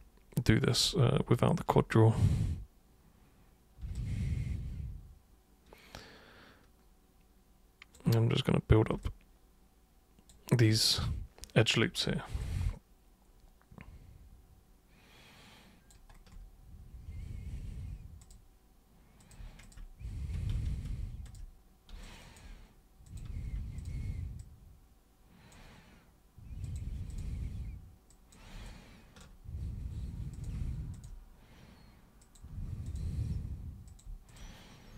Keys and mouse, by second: 1.3 alt+super+right click, 3.9-7.9 alt+super+drag, 9.0-10.6 alt+super+drag, 12.4-15.9 alt+super+drag, 18.2 super+click, 19.2 super+click, 19.4 super+Caps_Lock, 19.6 click, 20.5 ctrl+super+z, 21.2 shift+super+click, 22.0 alt+super+click, 23.0 super+click, 23.7 shift+super+click, 24.4-25.5 super+drag, 26.6 super+click, 27.0 shift+super+click, 28.1 super+click, 28.6 alt+super+click, 30.3 super+click, 30.9 shift+super+click, 32.2 super+click, 32.8 shift+super+click, 33.8 super+click, 34.2 shift+super+click.